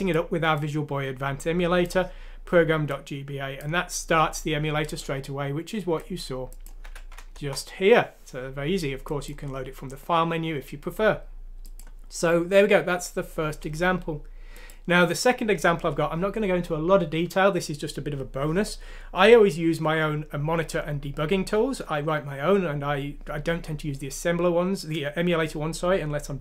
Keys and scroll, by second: 6.9 F6, 7.4 Return.